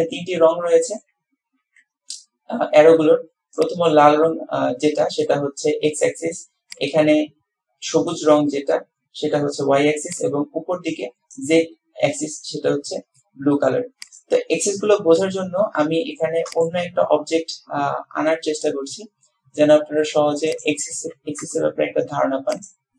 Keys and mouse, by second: 0.3-1.2 middle drag, 22.9 click.